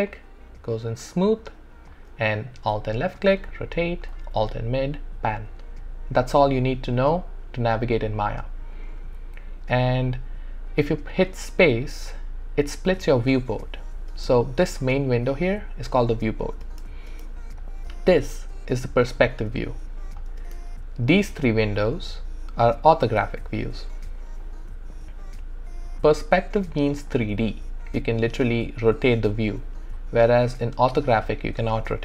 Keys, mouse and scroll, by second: 2.9-4.4 alt+drag, 4.7-8.9 alt+middle drag, 10.0-11.3 scroll down 1, 11.5 space, 14.1 space, 16.7 space, 20.4 space, 27.0 space, 27.1-32.0 alt+drag.